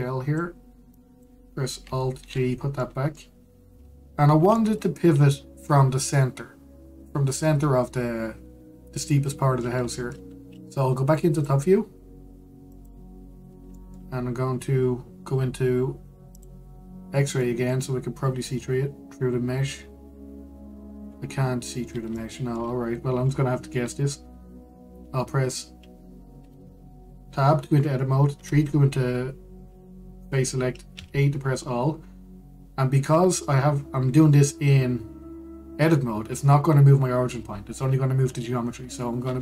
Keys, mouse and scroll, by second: 0.3 click, 1.6 click, 2.9 alt+g, 3.5-4.0 middle drag, 4.0-5.2 scroll up 1, 5.2-8.3 middle drag, 10.0-12.0 middle drag, 12.0 click, 13.4 click, 14.1-14.4 scroll down 1, 14.4-15.1 shift+middle drag, 15.1-17.0 scroll up 1, 17.0 click, 18.0-18.8 scroll up 2, 18.8-19.3 scroll up 1, 19.3-20.1 scroll down 2, 20.1-20.5 scroll up 2, 20.5-21.6 scroll down 2, 21.6-22.4 scroll up 2, 22.4-22.8 scroll down 2, 22.8-23.6 shift+middle drag, 23.6-24.0 scroll down 2, 24.0-29.0 shift+middle drag, 29.0 3, 30.3-30.9 scroll up 1, 31.6 a, 32.5-35.6 scroll up 1.